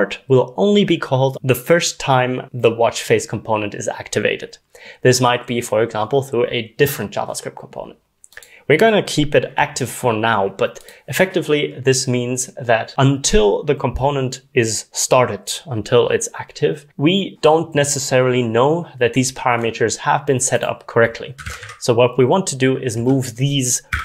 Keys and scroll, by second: 21.2-24.0 typing.